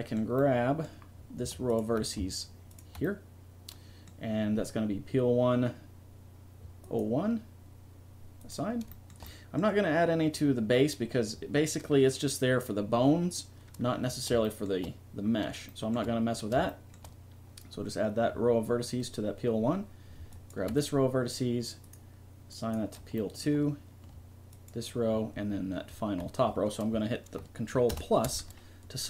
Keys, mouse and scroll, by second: 6.8-8.0 drag, 8.5 click, 9.0-10.6 middle drag, 16.0-20.0 middle drag, 20.3-21.8 right drag, 21.8 middle click, 22.7 click, 23.6 middle click, 24.5-26.6 right drag, 27.9 ctrl+KP_Add.